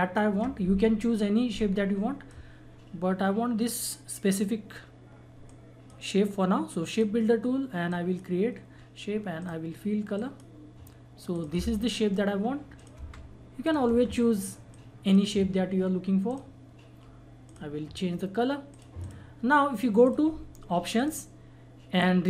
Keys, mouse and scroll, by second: 1.9-2.5 drag, 5.4-6.9 drag, 13.0 Delete, 13.6 click, 13.9 Delete, 14.7-16.3 drag.